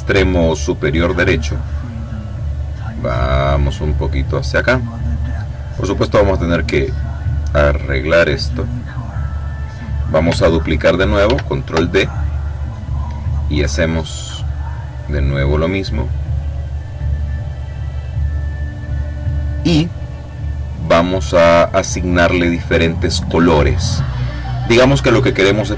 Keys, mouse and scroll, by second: 1.5-4.6 drag, 5.4-9.6 drag, 10.9 ctrl+d, 13.4-15.1 drag, 15.5-18.1 drag, 18.8 click, 19.7 click, 20.3 click.